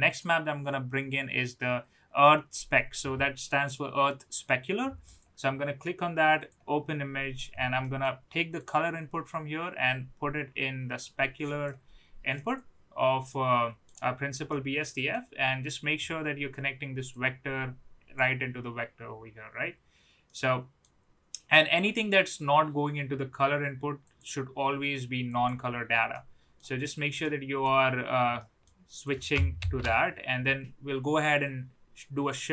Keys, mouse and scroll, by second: 7.9 middle click, 8.5-11.6 drag, 12.3-13.8 middle drag, 14.5-15.1 middle drag, 17.1-18.2 drag, 20.2-20.8 middle drag, 21.7-22.7 drag, 24.1-25.5 drag, 26.0-26.5 middle drag, 27.2-27.5 middle drag, 28.5 middle click, 29.0 click, 29.6 shift+d.